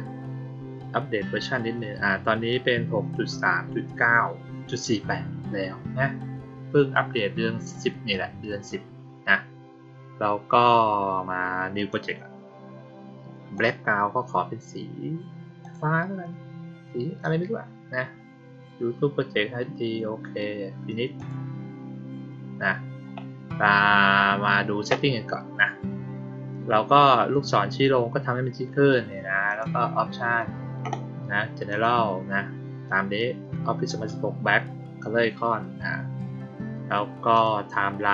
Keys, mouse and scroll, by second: 11.8 click, 13.4 click, 15.5 click, 21.0 click, 29.3 click, 31.6 click, 37.2 click.